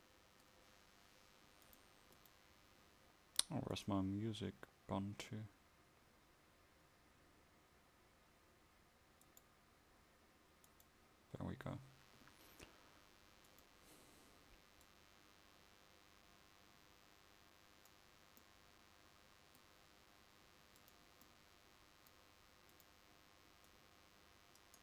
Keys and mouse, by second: 21.8-24.8 drag.